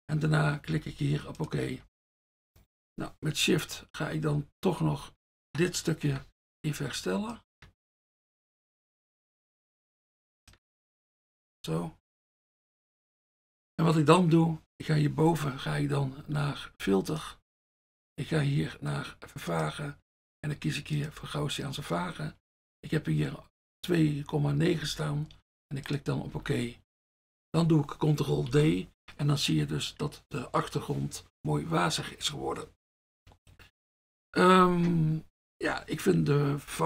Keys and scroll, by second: 1.9 F1, 6.1 shift+F1, 12.5 F1, 17.1 F1, 21.3 F1, 24.9 F1, 28.6 ctrl+d.